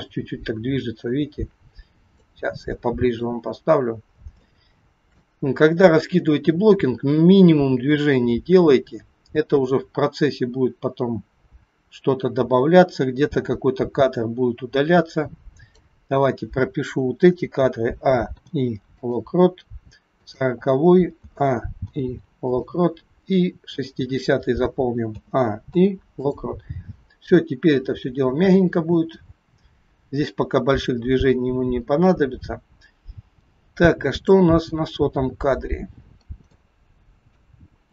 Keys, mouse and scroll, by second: 2.7 shift+middle click, 3.5-4.1 scroll up 5, 4.3 scroll up 2, 4.5 shift+middle click, 5.5 scroll down 1, 7.1 click, 17.6 a, 18.3 i, 20.3 click, 21.3 a, 21.9 i, 23.9 click, 25.1 a, 25.9 i, 27.5 click, 35.6-36.1 scroll down 4, 36.5 shift+middle click, 36.5-36.9 scroll down 2.